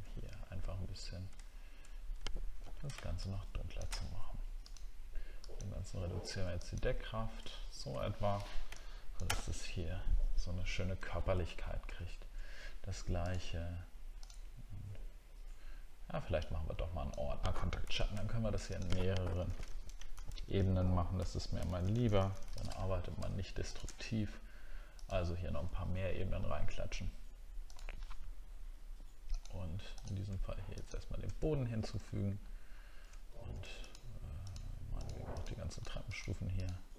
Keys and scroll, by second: 1.5-2.2 alt+scroll down 1, 2.6 ctrl+d, 11.9 alt+scroll up 1, 17.3-17.7 alt+scroll up 1, 17.8 ctrl+g, 19.5 shift+k, 32.0 alt+scroll up 1, 32.7 alt+scroll up 1.